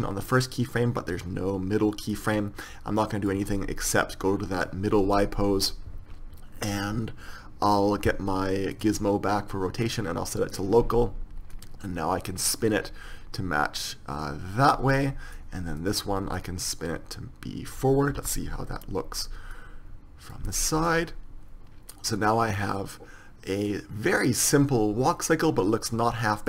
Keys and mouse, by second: 9.0-13.8 drag, 15.4 drag, 16.7-18.6 drag, 16.7-17.8 right drag, 18.6 KP_3, 19.8-21.3 drag, 22.5-23.1 drag.